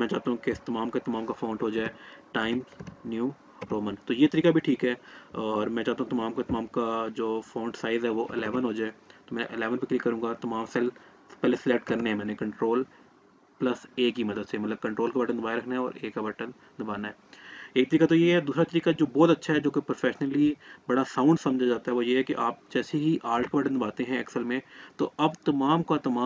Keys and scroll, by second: 11.2 ctrl+a.